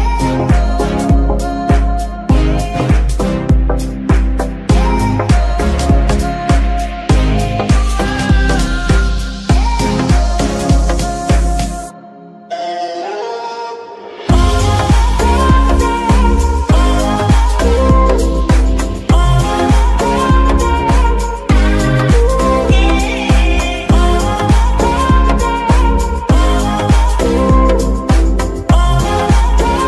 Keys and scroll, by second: 2.0 g, 2.4 Escape, 7.8 g, 8.4 Escape, 14.8 g, 16.3 Escape, 17.0 g, 17.3 Escape, 20.3 g, 20.9 Escape, 26.6 g, 27.6 Escape.